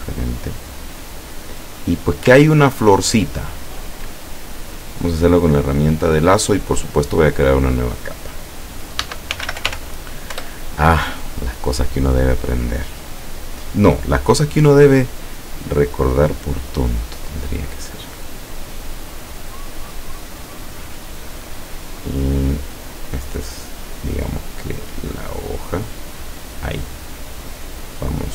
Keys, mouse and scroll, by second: 2.5-4.6 ctrl+scroll up 2, 4.8 click, 7.2 click, 9.1 Caps_Lock, 9.2-10.4 typing, 10.4 Return, 16.9 click, 18.3-19.4 drag, 23.3 click, 26.2 click.